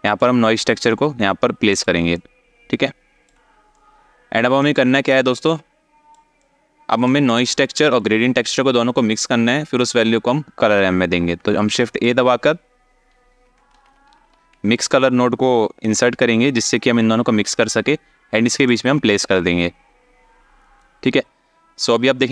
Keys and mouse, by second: 1.8-3.0 drag, 3.4 click, 5.0 click, 6.2 ctrl+click, 6.9 click, 11.3 shift+a.